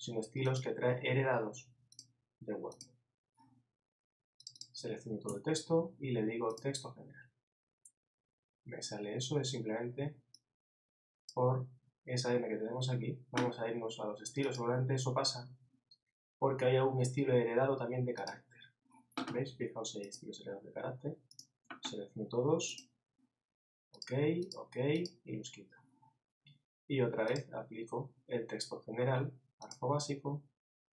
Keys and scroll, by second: 5.3 super+a.